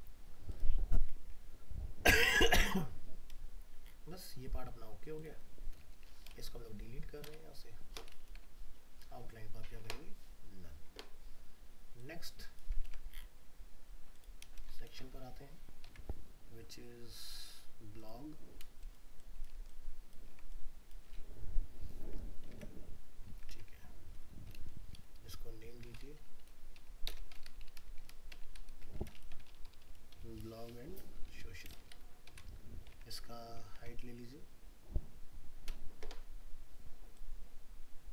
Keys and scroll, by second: 12.8 ctrl+c, 14.9 ctrl+v, 15.9 alt+Tab, 19.5 ctrl+space, 22.5 alt+Tab, 32.9 alt+Tab.